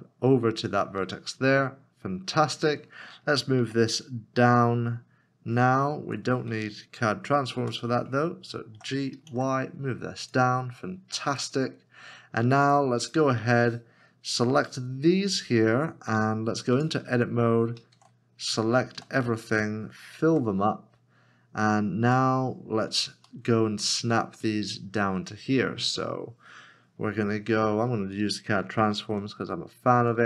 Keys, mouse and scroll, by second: 2.0 scroll down 1, 3.6 g, 6.0 Escape, 8.7 w, 8.9 g, 10.2 y, 16.7 y, 17.9 shift+a, 19.5 a, 20.3 f, 22.0 Tab, 22.7 scroll up 1, 23.7 shift+middle click, 28.6 alt+c, 29.0 g.